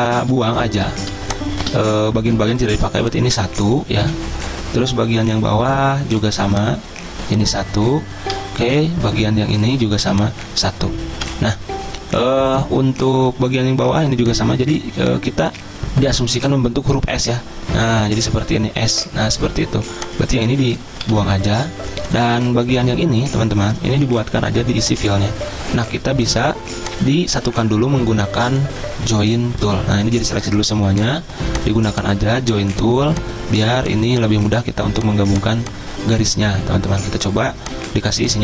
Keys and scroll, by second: 0.3 ctrl+z, 4.0 Delete, 8.3 Delete, 11.1 Delete, 16.1 Delete, 21.0 Delete.